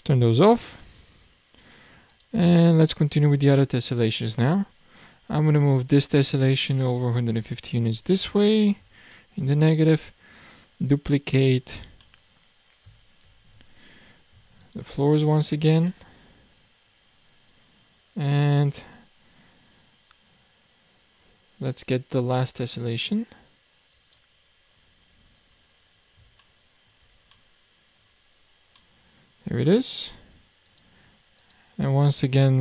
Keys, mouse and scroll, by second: 0.4 click, 0.9-2.5 scroll down 2, 2.5 click, 3.4-4.5 scroll up 1, 4.5 click, 6.0 click, 9.8 click, 10.4 click, 11.8 shift+d, 15.9-17.5 middle drag, 17.5-18.0 scroll up 3, 18.6-19.1 scroll down 4, 22.0-24.1 scroll down 4, 24.1 click, 24.9-25.5 scroll up 7, 26.4-28.3 shift+middle drag, 28.3-28.8 scroll down 5, 28.8-29.2 middle drag, 29.2 scroll down 1, 29.5-30.1 scroll up 2, 30.6 click, 31.4 click, 32.4-32.6 middle drag.